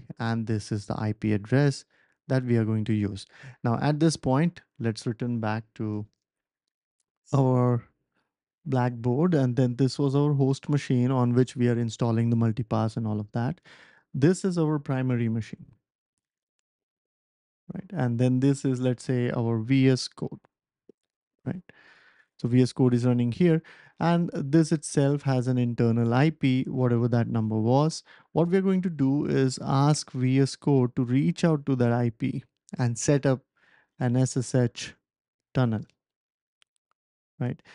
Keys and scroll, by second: 3.8 ctrl+alt+super+p, 4.5 typing.